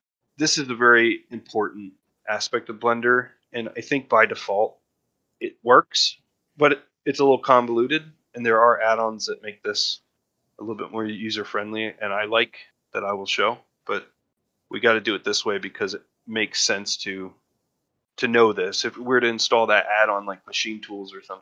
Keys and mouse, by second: 2.3 click, 2.8 click, 3.3 drag, 4.0 click, 4.7-7.0 drag, 10.2-11.4 drag, 11.8-13.3 drag, 14.7-15.1 drag.